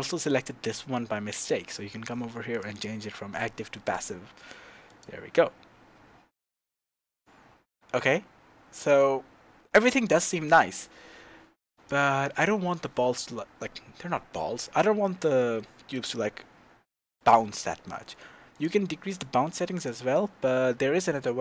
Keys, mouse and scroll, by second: 0.6 click, 2.5-4.0 drag, 4.9 click, 15.4-17.2 middle drag, 15.9-17.2 scroll down 4, 17.2 click, 17.6-18.5 shift+middle drag, 18.5 click, 19.7 click, 20.1-21.4 middle drag.